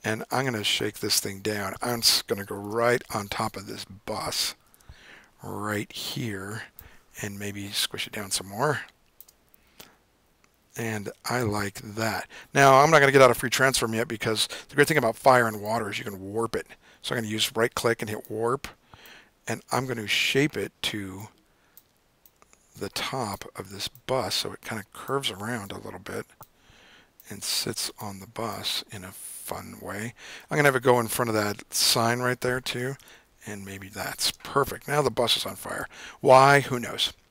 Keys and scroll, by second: 2.8 super+=, 2.9 super+=, 4.8 super+=, 33.0 v, 33.2 Down, 34.7 super+=, 35.1 super+-, 35.5 super+-.